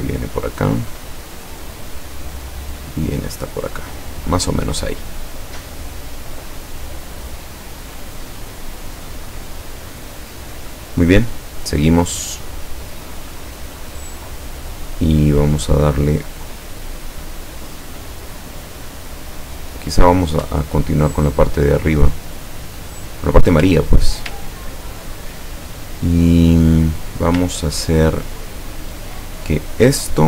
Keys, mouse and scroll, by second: 1.6 click, 3.9 click, 6.7 scroll up 2, 20.0 scroll up 2, 21.0 ctrl+scroll down 2, 22.0-23.2 ctrl+drag, 23.8 ctrl+scroll up 2, 24.5-25.1 ctrl+scroll down 4, 27.5-27.9 ctrl+scroll down 2.